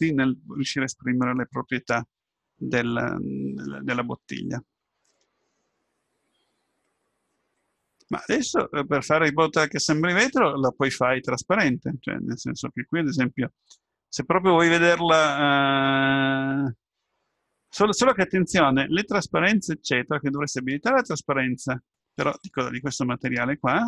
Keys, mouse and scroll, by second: 4.5-6.1 middle drag, 7.6-8.1 scroll up 1, 20.7 middle click.